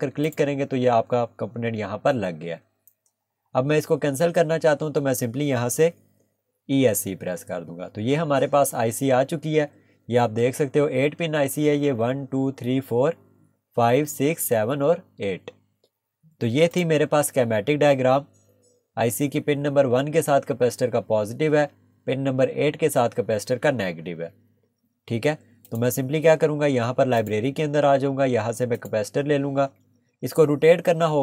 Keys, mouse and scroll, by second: 6.2 Escape, 8.5 scroll up 1, 16.7 click, 25.6 click.